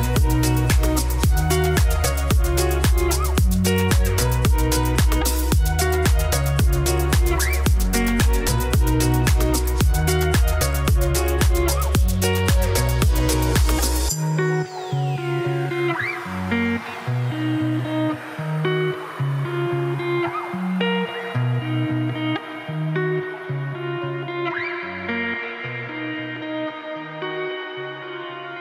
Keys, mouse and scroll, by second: 0.7-1.9 shift+middle drag, 4.2 click, 4.5 shift+s, 5.5 shift+a, 5.8 g, 6.9-8.1 drag, 10.8 z, 11.6 scroll up 2, 11.8 shift+middle click, 16.4 scroll down 5, 16.5-18.6 shift+middle drag, 18.6 alt+d, 19.3 click, 19.4 click, 19.7 g, 20.5-21.0 scroll down 2, 21.0 z, 21.7 click, 22.7 ctrl+s, 24.4-25.6 shift+middle drag, 27.0 shift+right click, 27.7-28.6 typing.